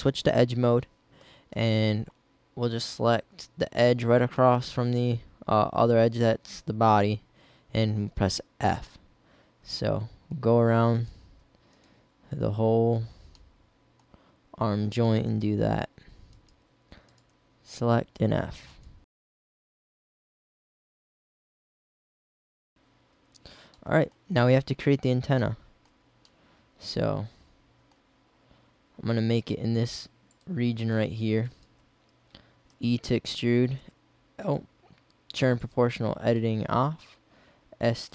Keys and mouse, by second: 1.8-3.7 middle drag, 6.9 f, 13.0 f, 17.9 f, 19.4-21.5 typing, 26.9 middle click, 27.3 middle click, 28.1-29.1 middle drag, 31.0-32.3 right drag, 32.5 e, 33.8 s, 37.0 s.